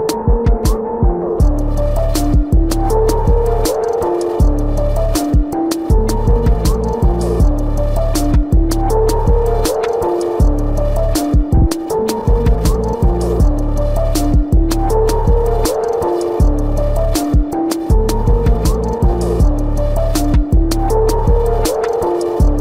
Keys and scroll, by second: 1.0 space, 1.6 ctrl+=.